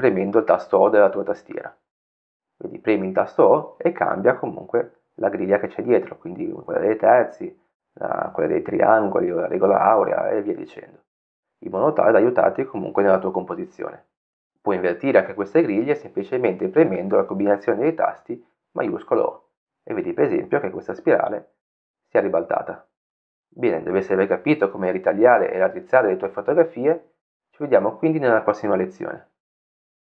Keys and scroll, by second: 5.2 o, 7.0 o, 15.8 shift+o, 17.3 shift+o, 18.6 shift+o, 21.5 shift+o.